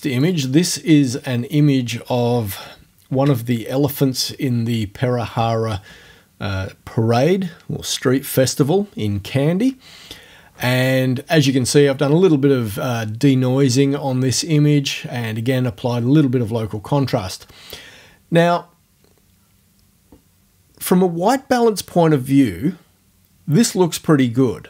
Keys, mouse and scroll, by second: 0.3 click, 3.1 ctrl+f, 3.9-5.3 middle drag, 5.3-7.1 drag.